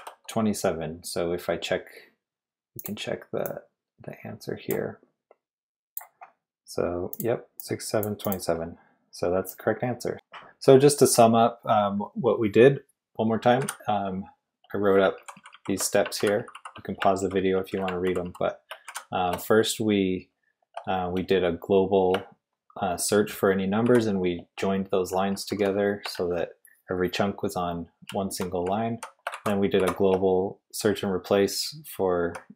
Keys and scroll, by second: 2.8 typing, 9.5-10.6 typing, 13.6 j, 15.1 ctrl+d, 15.3 ctrl+d, 15.5 ctrl+d, 16.2 ctrl+u, 16.4 ctrl+u, 16.5 ctrl+u, 17.2 ctrl+d, 17.4 ctrl+d, 17.5 ctrl+d, 18.0 ctrl+u, 18.2 ctrl+u, 18.8 j, 23.8 shift+v, 25.1 j, 25.3 j, 25.4 j, 25.6 j, 26.0 Escape, 27.4-29.8 typing, 31.9-32.4 typing.